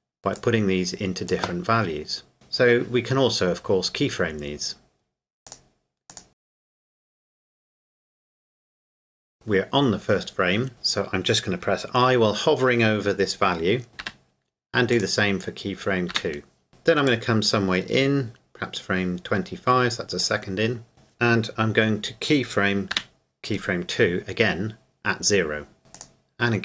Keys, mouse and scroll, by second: 5.5 click, 7.1 KP_0, 7.4 KP_Enter, 8.3 click, 8.8 KP_0, 8.9 KP_Enter, 14.0 KP_Enter, 14.9 click, 16.1 i, 17.1 click, 25.9 click.